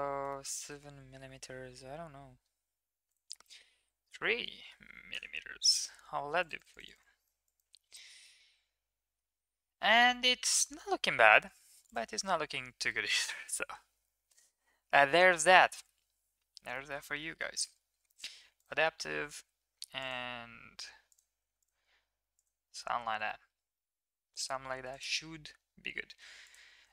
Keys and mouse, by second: 0.2 shift+middle click, 0.5 middle click, 3.0-5.1 drag, 4.7 m, 6.3 click, 6.5 click, 6.8 click, 7.0 click, 7.4 click, 7.9 shift+middle click, 8.2-9.2 middle drag, 9.4 shift+middle drag, 9.7-10.7 middle drag, 13.0 click, 14.2 ctrl+1, 14.9 middle click, 15.2 Tab, 15.7 shift+middle drag, 16.7 middle click, 18.5 click, 19.3 ctrl+r, 21.4 ctrl+r, 22.7 middle click, 23.3 shift+middle click, 24.7 ctrl+r, 26.7 ctrl+r.